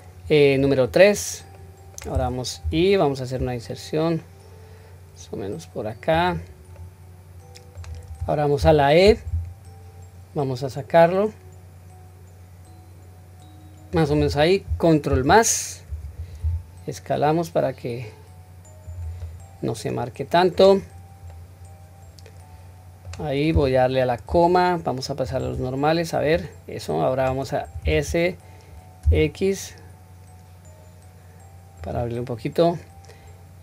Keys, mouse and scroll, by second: 1.6 middle click, 2.6 i, 6.8-7.8 middle drag, 8.6 e, 15.1 ctrl+KP_Add, 16.4 s, 19.2-20.7 middle drag, 21.3-23.0 middle drag, 26.3-27.3 middle drag, 27.8 s.